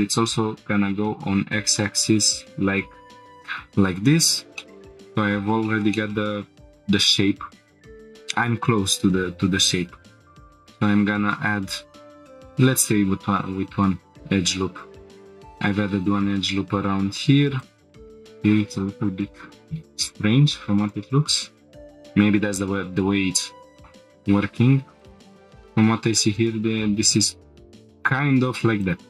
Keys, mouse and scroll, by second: 3.2-3.9 drag, 3.9 scroll down 1, 4.6 shift+middle click, 4.7 Tab, 5.1-5.5 middle drag, 5.6 shift+middle drag, 5.9-6.8 middle drag, 6.9 Tab, 7.8 click, 7.8 scroll up 4, 8.9 ctrl+r, 12.1 right click, 12.4-13.8 drag, 13.8 g, 14.0 z, 15.1 click, 15.9-16.2 scroll down 1, 16.4-17.6 scroll up 1, 17.6 click, 17.9 scroll down 2, 20.8 click, 21.6 scroll down 2, 22.3 scroll down 1, 23.8 shift+middle click, 23.8 scroll up 1, 25.0 click, 25.4 g, 26.3 g, 27.9 click, 28.8 click.